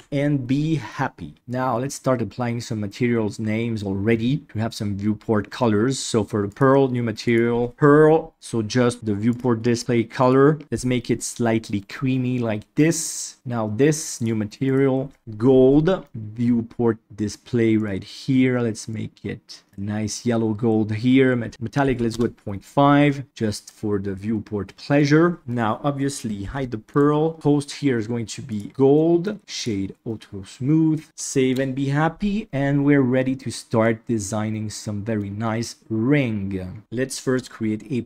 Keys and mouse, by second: 0.8-1.3 middle drag, 7.2 click, 8.4 middle click, 9.2 click, 10.2 click, 12.7-13.1 middle drag, 14.1 click, 14.7 click, 17.7 click, 21.5 click, 23.0 middle drag, 23.6-24.9 middle drag, 26.4 h, 26.9 click, 27.3-28.6 drag, 28.9 middle drag, 29.4 click, 30.0-30.9 middle drag, 31.0 alt+a, 31.0 ctrl+s, 31.2 shift+middle drag, 33.3-33.8 middle drag, 34.5-35.1 middle drag, 36.8 KP_7.